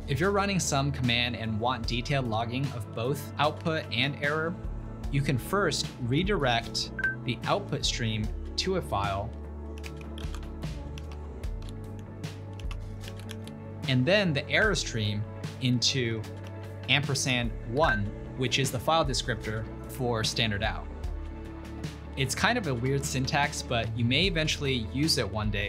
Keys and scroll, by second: 3.1 typing, 4.9-5.6 typing, 6.2 ctrl+l, 9.4-13.8 typing, 15.7-17.9 typing, 21.1 typing, 21.6 Return.